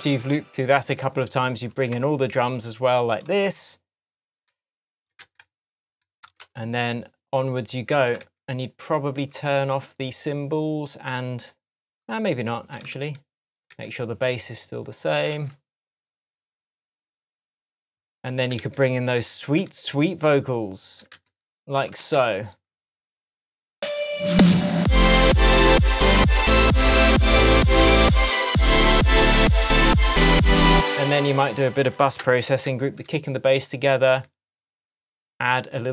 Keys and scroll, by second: 5.2 super+c, 6.5 super+v, 8.3 super+d, 13.0 super+d, 15.4 super+d, 18.6 super+d, 21.2 super+c, 22.1 super+v, 30.7 space, 32.7 super+g.